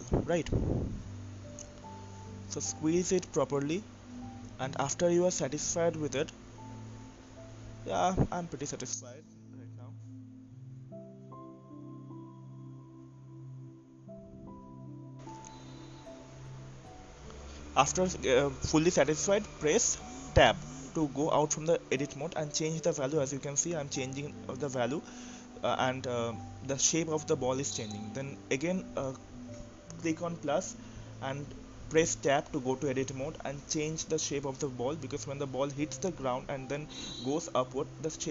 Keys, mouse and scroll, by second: 1.1 KP_3, 1.2 KP_3, 2.2 click, 12.2 click, 17.6 Tab, 19.7-24.4 drag, 26.9 click, 27.6 Tab, 28.7 click, 29.8 click, 37.7 Tab.